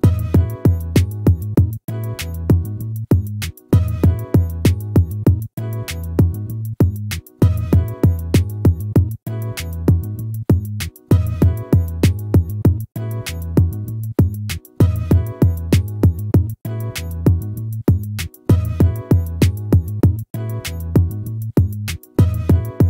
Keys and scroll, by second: 0.4 ctrl+z.